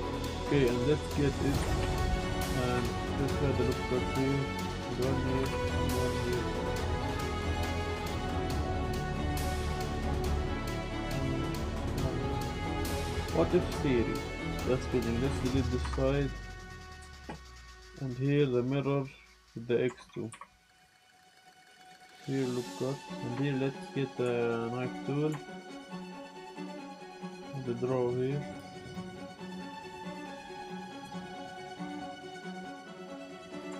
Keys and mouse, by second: 0.1 click, 0.5 drag, 0.9 click, 1.8 y, 2.3 Tab, 2.7 ctrl+r, 4.5 click, 4.7 click, 4.8 ctrl+r, 5.2 click, 7.0 Tab, 7.7 click, 7.9 middle click, 8.1 middle click, 8.4 ctrl+r, 9.7 click, 9.7 ctrl+r, 10.4 click, 14.7 click, 14.7 z, 15.8 Delete, 17.0 Tab, 18.2 drag, 19.3 click, 20.1 Tab, 20.1 click, 20.3 z, 20.6 click, 21.2 click, 21.7 ctrl+r, 23.4 shift+click, 24.3 shift+click, 24.9 click, 25.4 shift+click, 25.9-29.8 drag, 30.2-31.2 drag, 32.6-33.7 drag.